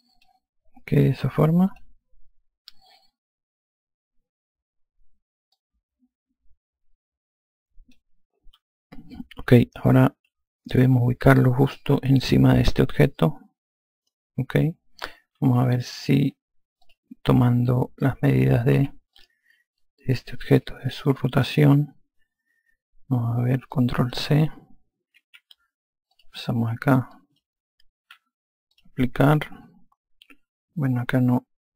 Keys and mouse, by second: 1.9 click, 5.8 alt+click, 11.4 alt+click, 15.9 alt+click, 17.3 click, 19.2 e, 19.5 click, 20.9 click, 24.1 click, 26.5 click, 29.1 click.